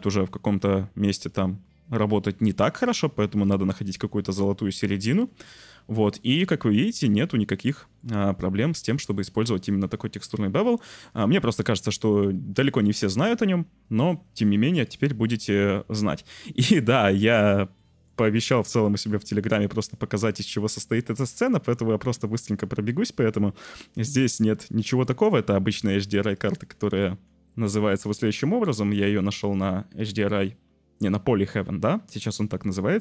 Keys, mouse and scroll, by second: 3.0-6.1 shift+middle drag, 6.1 click, 6.3 middle click, 6.4 click, 6.5 middle click, 7.1 click, 7.3 middle click, 7.6 middle click, 9.1 Tab, 9.6 Tab, 11.0 click, 12.8 Delete, 14.7 click, 15.6 click, 16.0-16.7 drag, 17.8 click, 19.2 `, 21.5 click, 23.7-24.9 middle drag, 24.9 click, 25.7-26.4 drag, 26.8 middle click, 27.6 middle drag, 29.4 click, 30.2-31.4 drag.